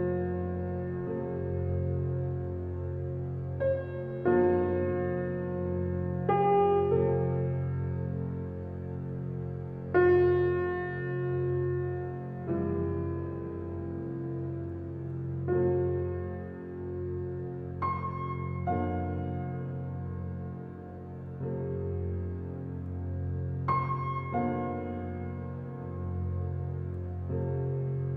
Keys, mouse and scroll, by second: 0.8-2.2 typing, 2.2 Return, 3.6 click, 7.8 click, 8.2-9.0 scroll down 1, 12.5-13.0 scroll down 1, 14.6 scroll up 1, 16.4 click, 17.0-17.3 scroll up 1, 19.2 scroll down 1, 20.4 scroll up 1, 23.5 click, 26.0-27.0 scroll up 1, 27.0 click.